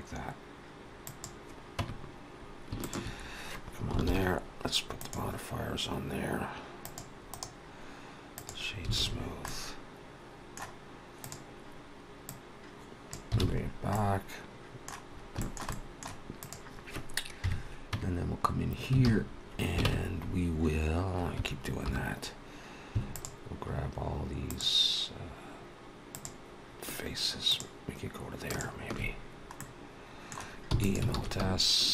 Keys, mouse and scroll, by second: 1.6 Tab, 2.7 shift+click, 3.9 ctrl+l, 6.7 click, 7.1 right click, 8.8 alt+a, 9.0 scroll down 3, 9.3 middle click, 11.1 click, 12.3 click, 13.3 alt+a, 13.5-14.3 scroll down 3, 13.8 middle click, 15.0 scroll up 2, 15.2 shift+middle click, 15.6 middle click, 16.2 click, 17.3 KP_3, 17.7 Tab, 18.3-18.7 scroll up 3, 18.9 alt+a, 19.2-19.6 scroll up 2, 19.7 ctrl+Tab, 21.6 3, 23.6 alt+shift+click, 24.3 alt+shift+click, 26.0 alt+shift+click, 27.6 alt+shift+click, 28.3 alt+shift+click, 29.1 scroll down 1, 29.4 middle click, 30.6 e, 31.0 alt+s.